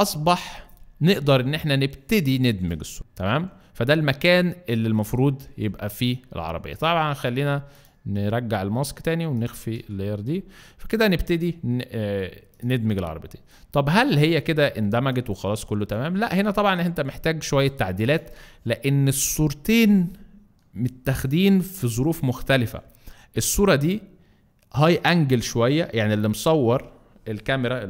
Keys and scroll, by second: 0.8 Down, 1.0 Down, 2.5 Return, 17.7 alt+space.